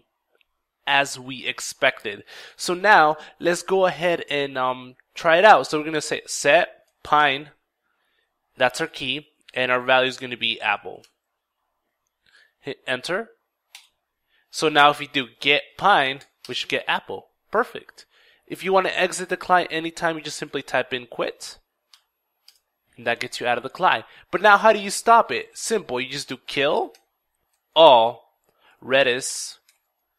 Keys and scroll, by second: 5.1 ctrl+s, 5.1 ctrl+e, 5.1 $, 5.5 ctrl+t, 6.0 ctrl+p, 6.3 ctrl+i, 6.5 ctrl+n, 6.7 ctrl+e, 8.4 ctrl+", 8.7 ctrl+", 9.2 ctrl+Left, 9.9 ctrl+a, 10.1 ctrl+p, 10.2 ctrl+p, 10.4 ctrl+l, 10.5 ctrl+e, 10.8 ctrl+Right, 13.3 ctrl+Return, 14.6 ctrl+g, 14.6 typing, 14.8 ctrl+e, 14.9 ctrl+t, 15.0 ctrl+space, 15.1 ctrl+p, 15.2 ctrl+i, 15.5 ctrl+n, 15.6 ctrl+e, 15.9 ctrl+Return, 19.5-21.4 typing, 20.8 ctrl+r, 21.9 ctrl+t, 21.9 ctrl+Return, 23.9 typing, 25.8 ctrl+k, 25.8 shift+4, 26.2 ctrl+i, 26.2 ctrl+l, 26.4 ctrl+l, 27.0 ctrl+a, 27.4 ctrl+l, 27.4 typing, 27.6 ctrl+l, 28.0 ctrl+space, 28.1 ctrl+r, 28.2 ctrl+e, 28.4 ctrl+d, 28.7 ctrl+i, 29.1 ctrl+s, 29.3 ctrl+Tab.